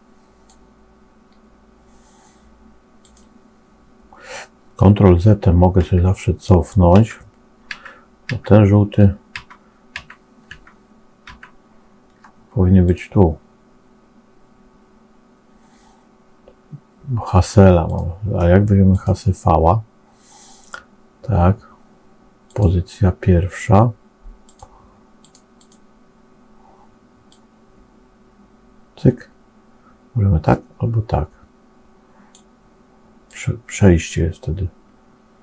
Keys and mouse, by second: 3.0 click, 5.0 ctrl+z, 17.7-18.9 drag, 22.3 click, 25.1 click, 25.5 click, 27.2-32.3 drag, 33.1-35.4 drag.